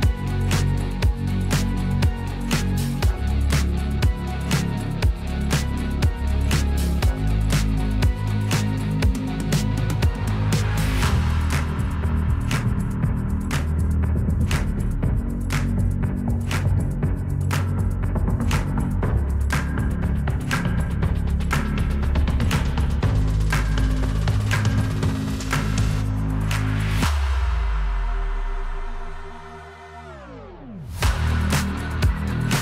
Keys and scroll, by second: 1.1 m, 3.3 \, 5.3 m, 9.3 \, 11.2 F2, 23.0 m, 30.6 \.